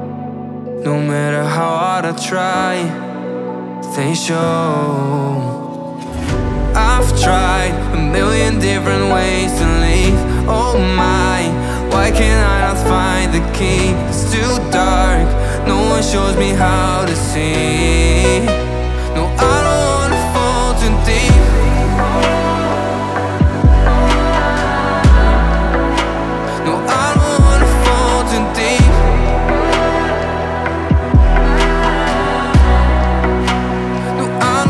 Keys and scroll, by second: 10.1 ctrl+z, 15.9 Delete.